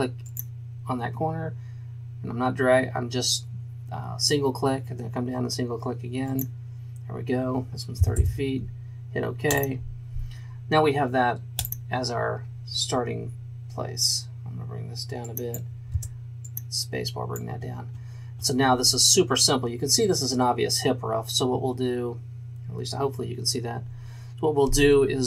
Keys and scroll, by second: 8.1 KP_0, 16.0 space.